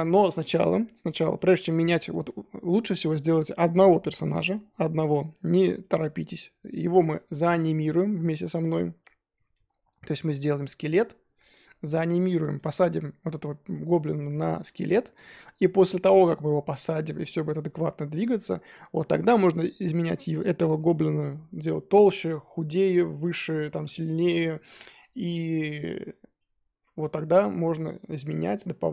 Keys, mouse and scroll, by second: 1.5-2.1 scroll up 4, 2.1-6.4 middle drag, 6.4-7.8 scroll down 4, 7.8-9.5 scroll down 1, 9.5 middle click, 10.1-11.4 scroll up 3, 11.4-20.7 middle drag, 20.7-25.5 scroll down 2, 25.5-26.5 scroll up 3, 26.5 scroll down 2, 27.6-28.2 middle drag, 28.2-28.6 scroll up 2, 28.7-28.9 scroll down 3.